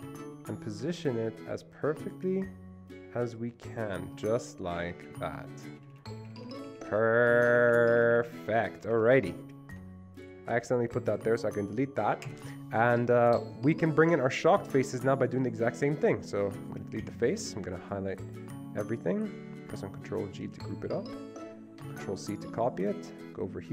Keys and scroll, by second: 0.1 Right, 5.0 Up, 5.1 Up, 5.3 Up, 5.4 Up, 5.9 Down, 6.0 Down, 6.2 Up, 6.4 Up, 6.5 Up, 6.6 Up, 6.7 Up, 6.8 Up, 7.0 Up, 7.1 Up, 7.3 Up, 7.5 Up, 7.6 Up, 7.8 Up, 8.1 Up, 8.3 Up, 8.8 Escape, 9.0 Escape, 10.3 ctrl+z, 12.3 Delete, 17.1 Delete, 20.5 ctrl+g, 21.9 ctrl+c.